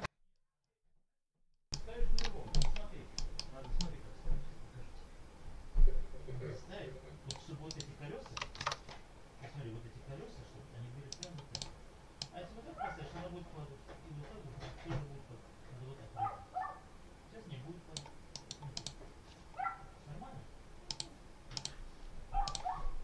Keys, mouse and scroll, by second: 1.4 ctrl+middle click, 2.4 ctrl+click, 3.0 middle click, 3.6-7.4 drag, 7.6 right click, 8.6 alt+Tab, 11.0 right click, 11.4 click, 12.1-18.0 drag, 18.2 right click, 18.6 click, 20.8 click, 21.4 click, 22.4 click.